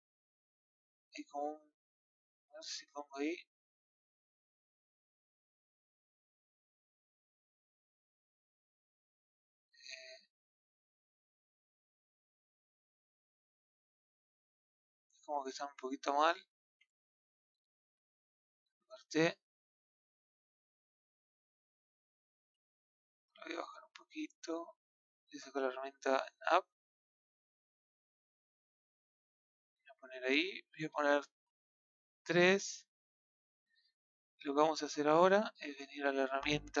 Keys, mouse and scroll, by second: 1.8 click, 2.8 shift+click, 3.4 shift+click, 4.7 click, 5.4 middle click, 6.3 click, 7.1-10.4 middle drag, 10.4 click, 11.5-11.9 drag, 13.4-16.1 middle drag, 16.1 click, 16.9-17.7 middle drag, 18.3 t, 18.9-20.4 middle drag, 20.4 shift+click, 20.8 middle click, 21.7 click, 22.2 shift+click, 22.6-23.8 middle drag, 23.8 click, 25.7 click, 28.3-29.9 middle drag, 29.9-30.3 scroll down 1, 31.3 KP_3, 32.7-33.2 scroll down 5, 33.2-34.7 shift+middle drag, 34.7-36.8 scroll up 2.